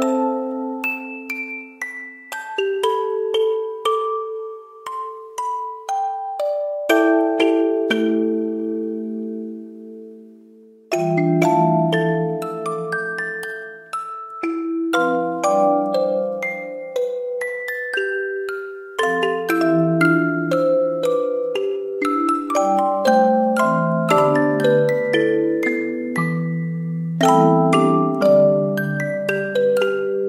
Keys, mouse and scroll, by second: 0.0-0.9 typing, 4.1-5.3 typing, 9.3-11.8 typing, 14.7 ctrl+z, 15.5 ctrl+z, 20.6 ctrl+z, 21.6 ctrl+z, 23.3 ctrl+z, 24.5-26.4 typing, 27.0 ctrl+z, 28.2-29.5 typing.